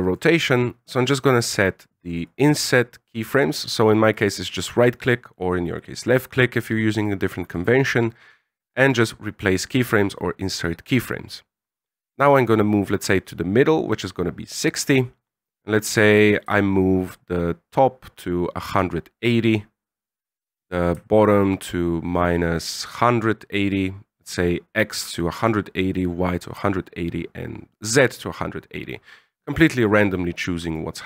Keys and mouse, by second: 1.3-2.4 right drag, 4.4-9.0 right drag, 12.2-13.6 drag, 15.2-20.0 drag, 20.8-24.8 ctrl+drag, 26.4-29.8 ctrl+drag, 30.6 right click.